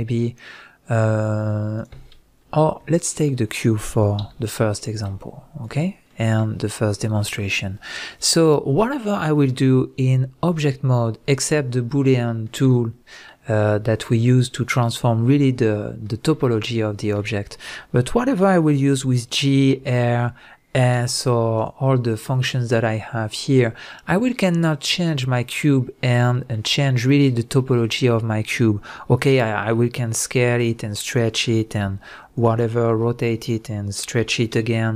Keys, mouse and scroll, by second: 1.8 click, 2.9 shift+click, 4.2 x, 4.9-5.6 middle drag, 5.3-5.6 scroll up 1, 5.6 click, 6.1-21.6 middle drag, 18.9 g, 21.6 right click, 23.8-31.1 middle drag, 26.1 scroll up 1, 27.5-27.8 scroll down 1, 30.4 s, 31.1 click, 31.4 s, 32.4 click, 32.9 r, 33.5 click, 34.2 s.